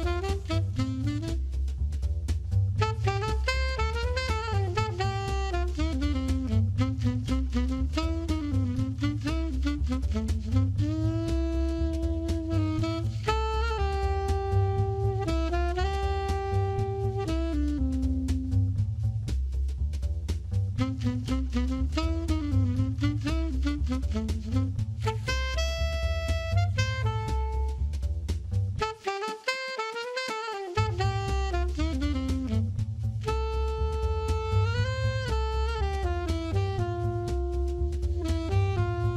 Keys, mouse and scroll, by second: 2.5 a, 2.7-4.2 scroll up 2, 4.2 a, 10.9 click, 12.7 click, 19.1 alt+right click, 20.1 middle click, 24.9 click, 27.4 alt+right click, 28.7 middle click, 31.6 click, 32.6 middle click, 35.4 alt+right click, 36.2 middle click.